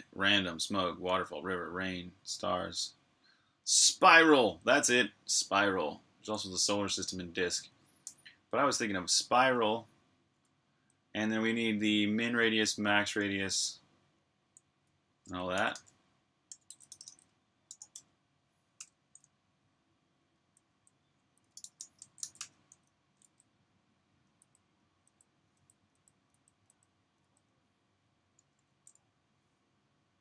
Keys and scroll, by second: 7.8 super+j, 10.2-10.6 typing, 14.0-17.7 typing, 18.6 Return, 20.2-23.5 typing, 25.4-27.0 typing.